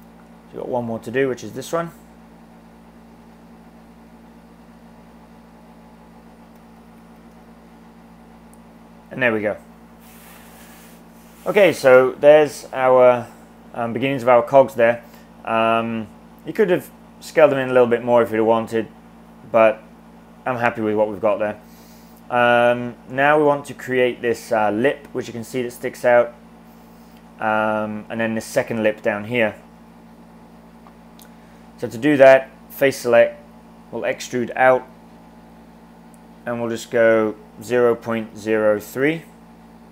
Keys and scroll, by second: 6.4-7.6 typing, 34.3 e, 37.5-39.2 typing.